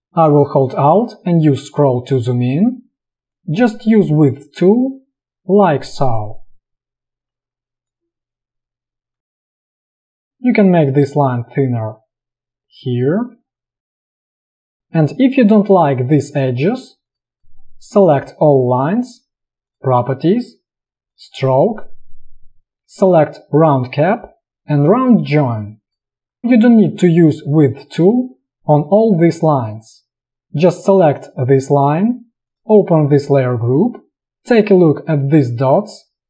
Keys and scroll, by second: 9.6 space, 14.2 space, 14.7 v, 17.3 space.